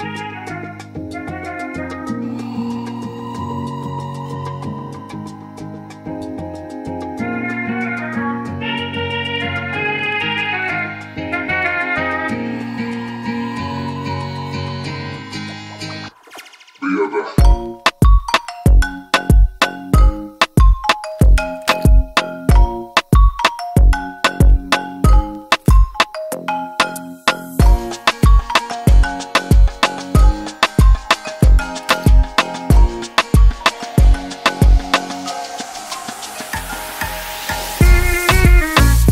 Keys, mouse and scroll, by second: 1.3 click, 1.5-2.2 typing, 2.4 Return, 4.1 click, 4.8 ctrl+d, 8.5 click, 11.4-12.4 typing, 13.4 click, 13.8-14.8 typing, 14.9 Return, 17.5 ctrl+d, 18.8 click, 21.3 click, 21.8-22.8 typing, 23.0 Return, 24.5 click, 25.0 typing, 25.7 Return, 27.7 ctrl+d, 29.5 click, 29.8-33.0 typing, 31.8 click, 34.7 click, 35.7 ctrl+a, 38.0 click.